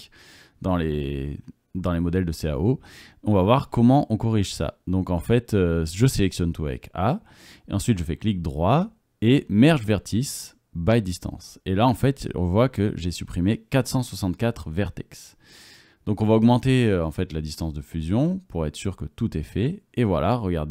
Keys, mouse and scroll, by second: 0.2 middle click, 0.4 click, 0.6 middle click, 0.6 click, 0.8 middle click, 0.8 click, 1.0 middle click, 1.2 middle click, 1.5 ctrl+click, 2.2 ctrl+z, 2.5 ctrl+z, 3.0 ctrl+z, 3.6 middle click, 4.1 click, 5.3 click, 5.7 a, 8.0-8.9 drag, 8.0-8.9 middle drag, 8.0-8.9 right drag, 17.4 KP_0.